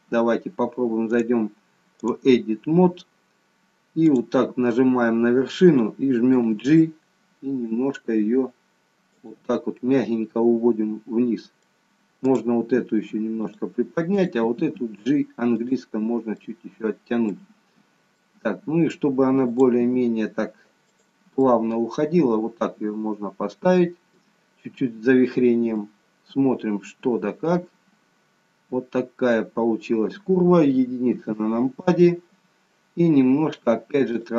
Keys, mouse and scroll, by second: 1.0 click, 4.0 click, 6.3 g, 9.7 middle click, 12.2 click, 14.3 click, 14.3 g, 16.3 middle click, 18.1 middle click, 19.5 click, 19.8 g, 21.3 middle click, 25.9 middle click, 31.1 KP_1.